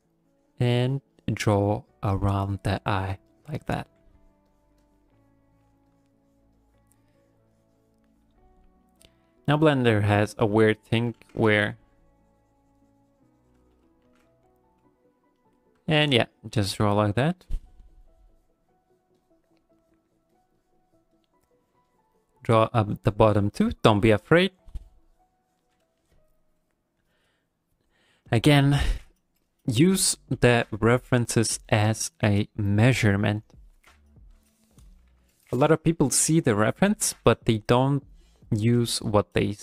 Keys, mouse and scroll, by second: 0.2 click, 0.4 click, 0.7 click, 1.1 click, 1.5 click, 1.8 click, 2.1 click, 2.4 click, 2.7 click, 3.3 click, 3.6 click, 3.8 f, 4.2 click, 4.5 click, 4.8 click, 5.1 click, 5.9 click, 6.2 click, 6.6 click, 6.9 click, 7.5 click, 7.7 click, 8.1 click, 9.0 middle click, 10.1 click, 11.2 ctrl+z, 11.5 click, 14.1 ctrl+z, 15.4 middle click, 15.9 shift+middle click, 16.2 click, 16.5 click, 16.7 click, 17.0 middle click, 17.4 click, 17.6 click, 17.8 click, 18.3 click, 18.6 click, 18.8 click, 19.2 click, 19.8 click, 20.3 click, 20.6 click, 20.8 click, 21.1 click, 21.9 click, 22.1 click, 23.3 click, 23.6 click, 24.0 click, 24.5 click, 24.8 click, 25.1 click, 25.4 click, 26.0 middle click, 27.0 middle click, 34.6 middle click, 35.1 KP_1, 36.8 ctrl+middle click, 38.4 click, 38.9 click.